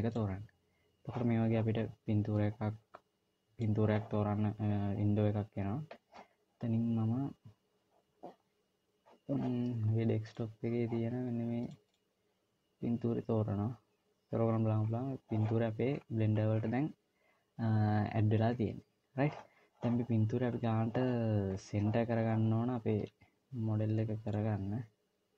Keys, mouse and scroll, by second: 14.9-16.3 scroll up 4, 16.3 scroll down 1, 16.4-16.8 scroll down 4, 16.8 scroll up 1, 17.0 scroll down 1, 21.0-22.0 scroll up 1, 22.0-23.3 scroll down 2, 24.7 click.